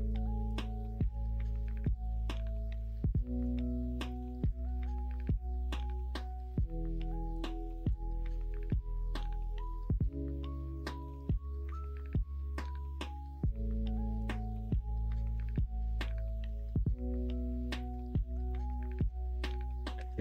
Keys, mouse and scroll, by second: 0.0 click, 1.1 ctrl+z, 7.9-18.5 drag, 18.7 ctrl+z.